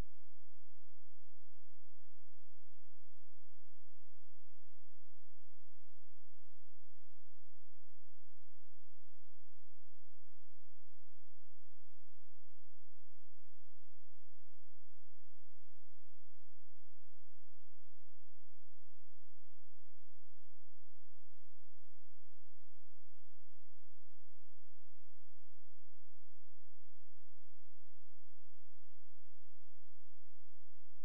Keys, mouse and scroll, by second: 1.1 click, 11.9 click, 14.2 shift+Page_Up, 17.2 shift+click, 19.7 right click, 21.0 click, 22.3-24.5 scroll up 1, 24.5 click.